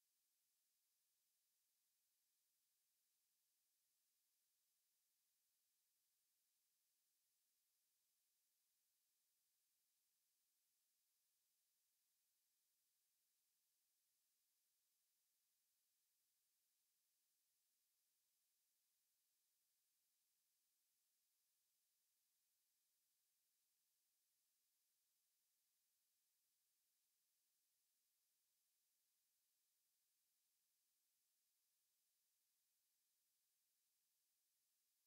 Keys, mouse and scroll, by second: 1.5-3.5 drag, 5.5-7.5 middle drag, 9.3 middle click, 9.9 KP_1, 12.7 KP_3, 14.5 KP_5, 16.9 KP_7, 18.7 KP_9, 25.4-27.5 middle drag, 34.1 x.